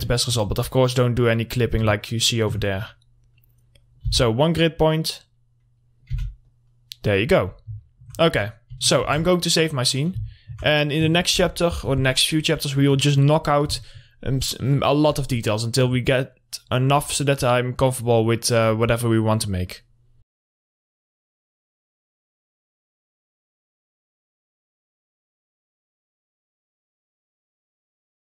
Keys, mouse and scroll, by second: 0.3 alt+middle click, 1.0 click, 1.9 scroll down 1, 2.2 alt+middle click, 3.1 click, 4.3 r, 5.0-6.3 drag, 6.3 w, 6.6 click, 7.7 scroll down 1, 8.0 alt+middle click, 8.4 click, 8.7 scroll down 1, 9.2 ctrl+s, 10.0 middle click, 10.5 alt+middle click, 11.5 click, 12.6 scroll down 1, 17.6 scroll up 1, 18.5 click, 18.9 scroll down 1.